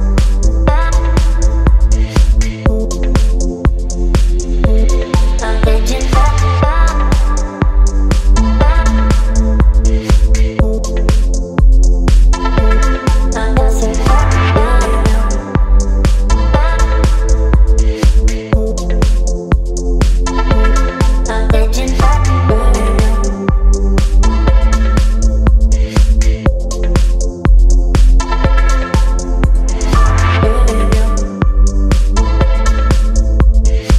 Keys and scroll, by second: 0.7 space, 1.5 space, 1.9 v, 3.8 ctrl+t, 6.8 Return, 8.3 ctrl+t, 10.6 Return, 13.1 Delete, 13.4 space, 13.7 v, 16.0 Left, 16.1 Left, 16.1 Left, 16.2 Left, 16.9 space, 17.9 ctrl+t, 21.2 Return, 23.5 ctrl+t, 24.7 Return.